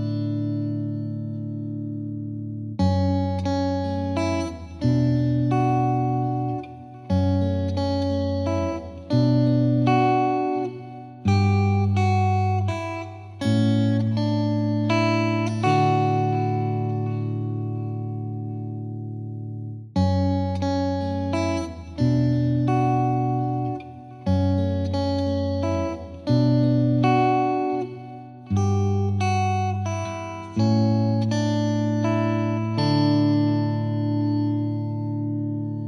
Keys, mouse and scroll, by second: 0.2-1.2 drag, 1.2-1.6 scroll down 1, 1.6-3.0 drag, 3.0 scroll down 1, 3.1-3.6 shift+middle drag, 3.6 click, 4.0 right click, 4.1 scroll down 1, 4.3-5.0 middle drag, 5.0 KP_1, 5.3 scroll up 2, 5.5-6.1 shift+middle drag, 6.1 g, 7.4 KP_7, 7.9 ctrl+z, 8.3-8.8 middle drag, 8.8 KP_7, 9.2 middle click, 9.6 KP_1, 9.9 g, 11.4 KP_7, 11.7 scroll up 3, 11.9-12.4 shift+middle drag, 12.4 s, 16.5 z, 16.7 middle click, 16.8-17.1 scroll down 6, 17.1-17.5 middle drag, 17.5 g, 18.3 middle click, 18.4 scroll down 1, 18.6-19.0 shift+middle drag, 19.0 drag, 19.3 ctrl+s, 20.2-20.6 scroll down 1, 20.6-21.0 middle drag, 21.0 scroll down 1, 21.2-21.8 scroll up 5, 21.8 middle drag, 22.1 shift+a, 23.4 KP_7, 23.9 s, 26.9 middle drag, 27.2 scroll up 1, 27.4 middle click, 27.7 s, 28.3 scroll up 2, 28.5-28.9 right drag, 28.9-29.5 shift+middle drag, 29.5 scroll down 2, 29.7-30.0 middle drag, 30.0 s, 31.0-31.5 middle drag, 31.5 ctrl+a, 32.0-33.0 middle drag, 33.0-35.8 drag.